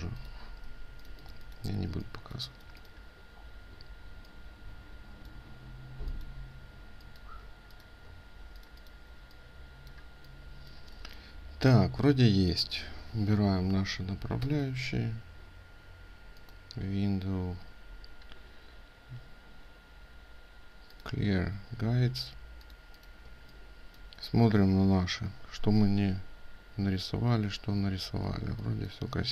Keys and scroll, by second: 0.2 ctrl+space, 8.1 ctrl+alt+space, 27.8 ctrl+space.